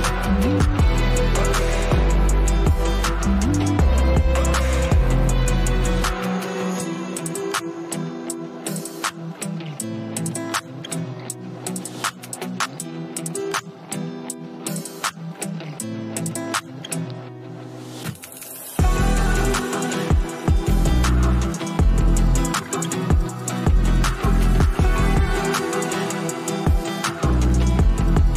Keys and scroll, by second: 5.9 ], 6.1 ], 6.4 ], 7.6 space, 15.8 space.